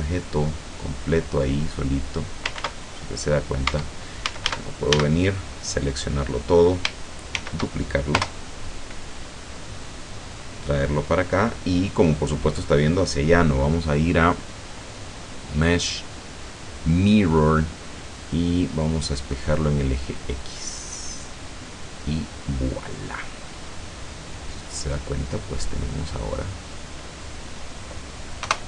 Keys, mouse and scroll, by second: 2.0 click, 2.7 ctrl+z, 3.7 Tab, 4.3 a, 5.6-6.2 scroll down 4, 7.5 shift+d, 8.1 Return, 9.6-11.3 drag, 11.5 middle click, 15.0 click, 18.7 click, 21.8 click, 23.1-28.1 middle drag, 28.5 KP_0.